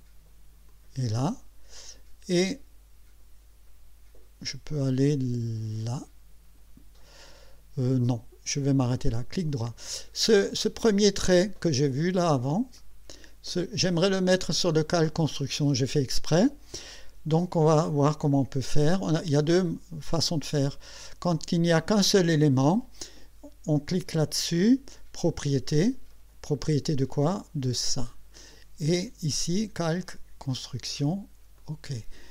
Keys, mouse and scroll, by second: 0.7 click, 9.1 right click, 12.8 click, 18.1 click, 25.4 click, 27.7 click, 29.4 click, 30.5 click, 31.6 click.